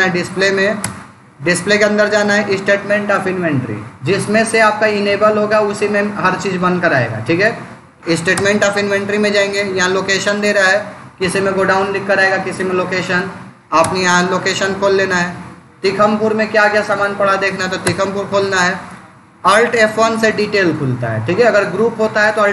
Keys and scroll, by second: 0.7 Return, 1.5 Down, 8.2 Return, 13.7 Return, 16.9 Down, 17.7 Return, 19.7 alt+F1.